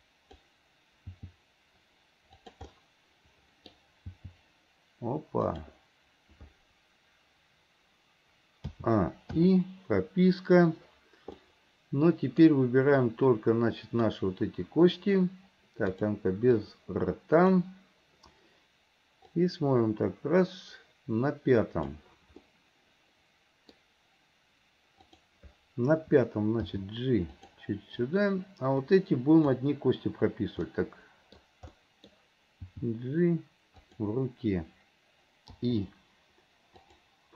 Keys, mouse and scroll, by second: 1.1 g, 2.8-4.1 middle drag, 4.1 g, 8.8 a, 9.5 i, 11.5-13.1 middle drag, 13.1-14.3 drag, 16.6-17.7 drag, 19.5-22.1 drag, 22.5-25.1 middle drag, 25.1 click, 26.6 g, 28.9-29.7 drag, 30.7-32.6 middle drag, 32.6 g, 35.6 i, 36.9 click.